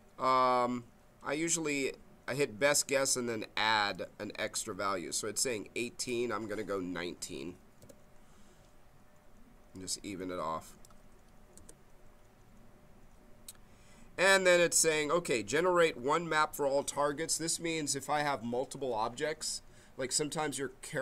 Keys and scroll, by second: 7.3 1, 7.8 9, 11.5 BackSpace.